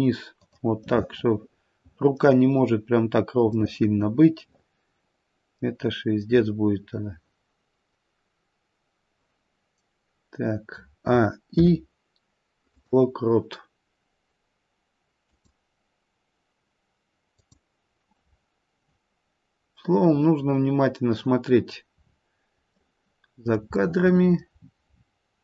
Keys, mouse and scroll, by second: 0.8 middle click, 1.5 middle click, 3.7 middle click, 11.5 a, 11.5 i, 18.3 click, 18.3-19.2 scroll down 3, 20.0 middle click, 21.9-22.6 scroll up 5, 22.8 middle click, 22.8 scroll up 1, 23.7 middle click, 24.6-25.3 scroll down 9.